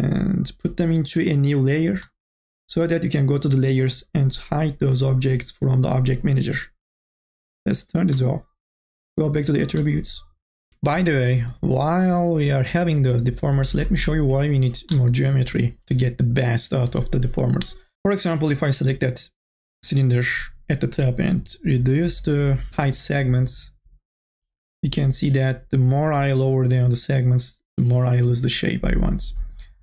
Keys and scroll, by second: 15.1 4, 15.4 e.